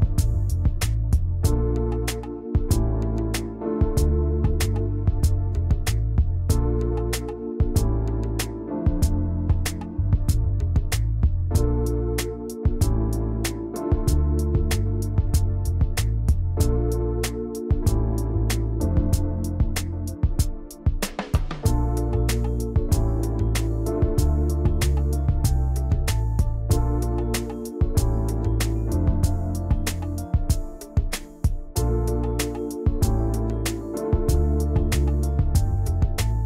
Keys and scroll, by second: 9.8 ctrl+c, 10.1 ctrl+shift+v, 23.9 ctrl+shift+], 33.5 ctrl+x, 35.0 v.